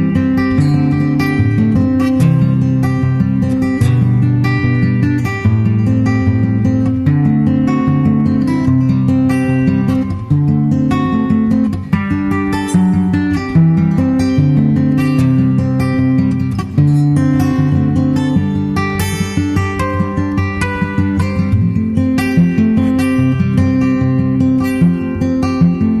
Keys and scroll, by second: 11.9 super+Right, 15.8 super+Right, 24.0 super+Right, 25.3 super+s, 25.6 super+Tab.